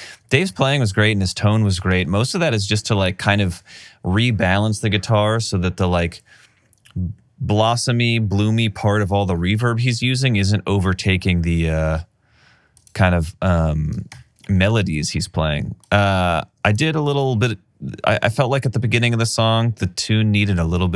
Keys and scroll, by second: 2.3 alt+r, 14.6 r, 17.4 typing, 19.0 typing.